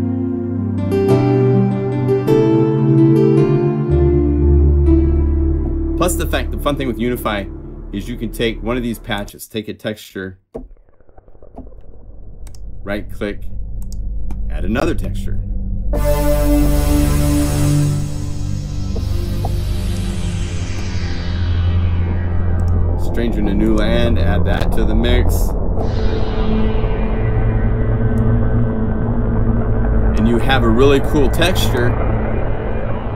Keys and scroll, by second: 4.0 F4, 4.9 F4, 18.8 F2, 19.3 F1.